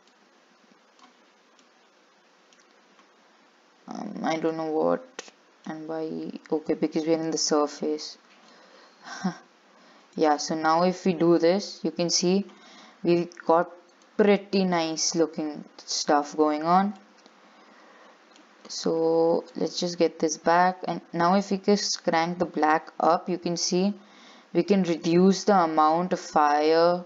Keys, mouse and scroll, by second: 0.3-1.8 drag, 1.8 scroll down 2, 2.0-8.8 middle drag, 8.8 click, 11.1-14.1 middle drag, 14.6 click, 16.0-16.6 scroll up 2, 17.5 scroll up 4, 18.3-19.9 shift+middle drag, 19.9-25.2 drag.